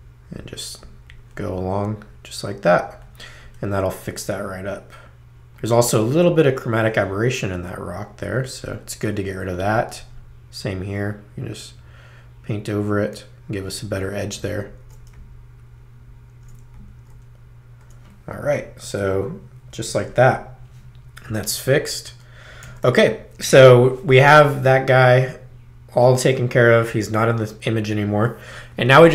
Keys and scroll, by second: 8.4 space, 18.6 space, 21.3 super+-, 22.6 super+0.